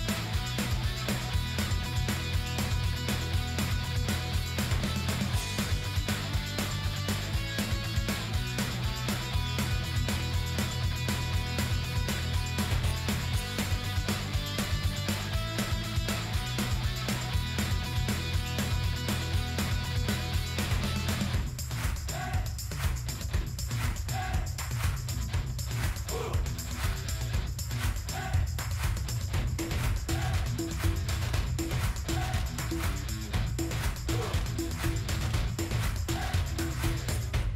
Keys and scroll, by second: 5.7 ctrl+g, 15.7 ctrl+g, 23.2 ctrl+g.